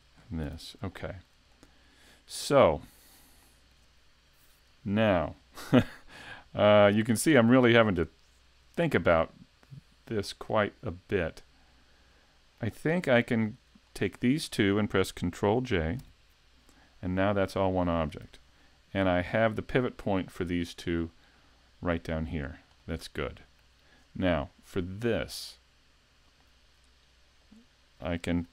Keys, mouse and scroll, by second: 0.2 scroll up 3, 0.4 a, 1.0 shift+middle click, 3.6 shift+middle click, 7.7 right click, 8.9 middle click, 13.4 shift+right click, 13.8 scroll up 3, 14.2 shift+middle click, 16.0 ctrl+j, 18.3 a, 19.3 right click, 19.9 middle click, 20.6 shift+middle click, 22.4-22.7 scroll down 2, 22.8 middle click, 27.4 click, 28.1 shift+middle click.